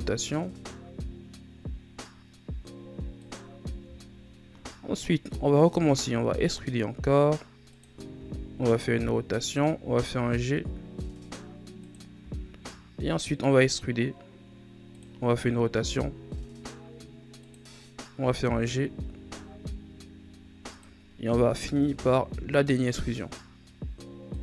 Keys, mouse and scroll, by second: 3.5-3.9 scroll down 1, 3.9-5.6 scroll up 6, 5.6 e, 8.1 r, 9.7 g, 12.1 e, 15.2 r, 18.1 g, 21.5 e.